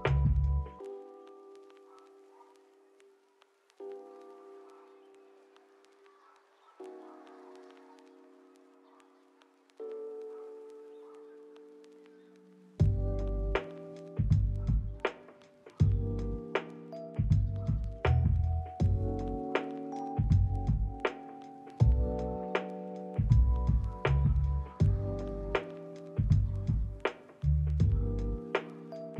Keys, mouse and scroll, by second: 1.1 middle click, 1.5 double click, 2.9 middle click, 4.7 middle click, 5.3 middle click, 5.9 shift+middle click, 6.1 ctrl+middle click, 6.3 shift+middle click, 6.8 double click, 7.1 shift+middle click, 7.5 double click, 7.6 middle click, 7.9 double click, 8.5 shift+middle click, 8.7 shift+middle click, 9.3 double click, 9.6 shift+middle click, 10.1 s, 10.5 double click, 10.9 ctrl+middle click, 11.0 middle click, 12.9 double click, 14.0 middle click, 14.4 double click, 15.2 ctrl+middle click, 16.0 double click, 17.7 r, 17.8 r, 18.2 ctrl+click, 18.3 g, 18.7 ctrl+click, 20.2 middle click, 23.2 ctrl+middle click, 23.5 middle click, 23.7 ctrl+middle click, 25.6 ctrl+middle click, 26.3 s, 27.0 right click, 27.6 KP_8, 27.7 Return, 28.1 double click.